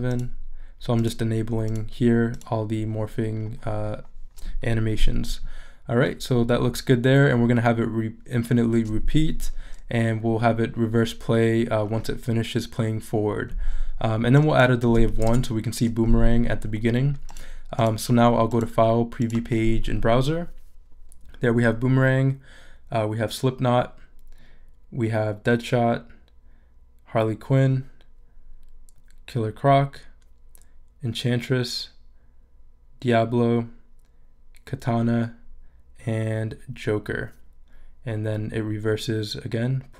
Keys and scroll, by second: 14.9 |.